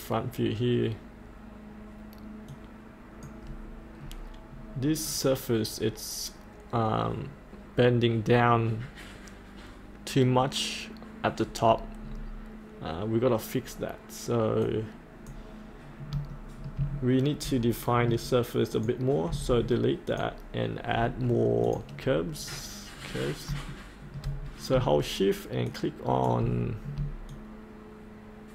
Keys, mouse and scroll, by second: 2.9-3.9 drag, 4.0-11.6 scroll down 1, 11.6 scroll up 1, 14.6-16.1 drag, 16.3 shift+middle click, 17.5 middle click, 18.7 click, 19.3 Delete, 20.0 click, 22.5 scroll down 1, 24.4-24.7 scroll down 1, 25.7 shift+click, 27.3-28.5 shift+drag.